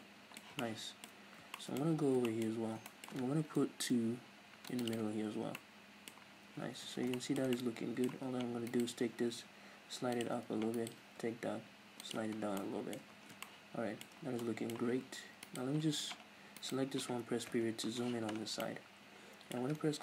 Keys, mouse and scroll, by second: 1.3 scroll up 2, 1.8 middle click, 1.9 Tab, 2.6 scroll up 2, 2.9-3.5 shift+middle drag, 3.5 ctrl+r, 5.0-5.3 drag, 5.3 Tab, 5.6-6.9 middle drag, 6.9 Tab, 7.2-8.7 shift+middle drag, 8.7 alt+right click, 9.3 g, 10.3 click, 10.8 alt+right click, 11.3 g, 12.2 Tab, 12.4 scroll down 1, 12.7-15.5 middle drag, 13.1 Tab, 13.2-13.6 scroll up 2, 15.5 right click, 16.6 right click, 17.6 KP_Decimal, 18.2-18.7 scroll down 2, 18.7-20.0 middle drag.